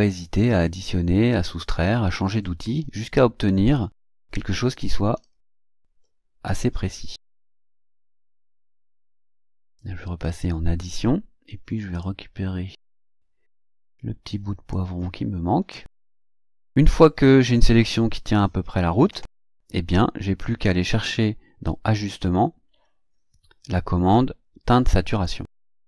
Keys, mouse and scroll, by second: 1.7-2.1 scroll up 2, 5.1-5.9 ctrl+scroll up 4, 7.7-8.8 drag, 10.2 click, 10.9 click, 12.0-14.9 drag, 16.0-16.7 ctrl+scroll down 4, 19.9-20.9 drag, 21.9 click, 25.1 click.